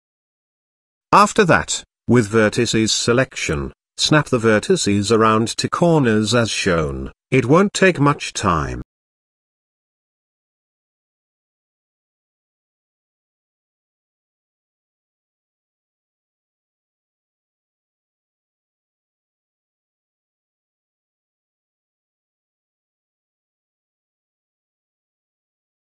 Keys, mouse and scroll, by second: 0.4 click, 0.9 z, 1.6 click, 2.9 shift+middle click, 3.6 middle click, 4.3 g, 5.8 g, 7.8 middle click, 8.6 click, 9.9 g, 11.3 g, 12.9 z, 13.3-13.6 middle drag, 13.7 Tab, 14.3 middle click, 14.7-15.1 shift+middle drag, 15.4-15.9 shift+middle drag, 16.6 Tab, 17.5 z, 18.1 click, 19.2 g, 21.7 g, 22.7 middle click, 24.1 Return, 24.7 KP_7, 25.3 click.